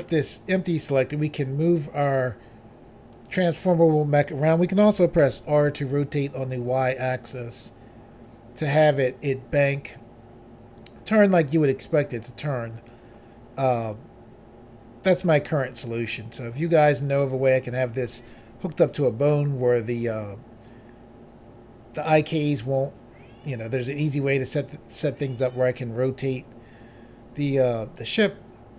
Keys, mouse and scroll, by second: 0.1 g, 3.2 right click, 3.4 right click, 4.9-5.3 typing, 12.9 right click, 13.0 right click, 16.7 click, 16.8 click.